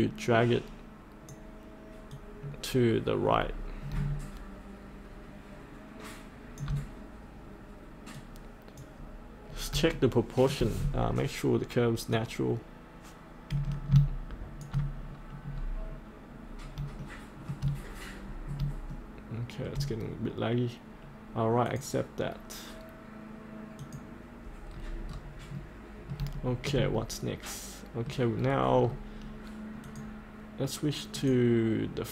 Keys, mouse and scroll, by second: 9.5 scroll up 1, 10.0 shift+middle click, 12.2-14.7 drag, 15.1-16.7 scroll up 1, 17.0 shift+middle click, 18.2-18.6 scroll up 1, 18.9 shift+middle click, 21.6-22.9 drag, 24.8-25.5 scroll up 1, 25.5 middle click, 26.3 shift+middle click, 27.1 middle click, 28.4-28.8 scroll down 1, 29.8 click.